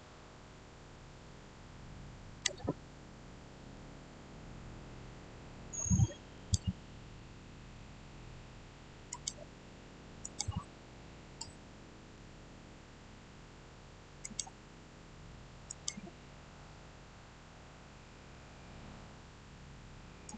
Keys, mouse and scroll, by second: 3.1 click, 3.2 middle click, 4.4 scroll down 1, 6.2 click, 9.0 click, 11.3-14.1 middle drag, 14.1 click, 20.2-20.3 drag.